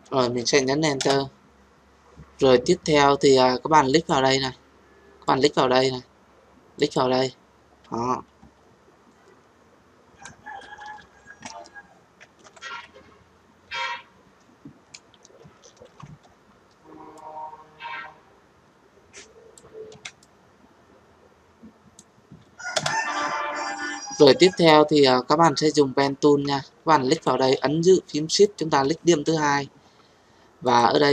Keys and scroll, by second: 0.9 Return, 15.8 ctrl+t, 22.7 Return.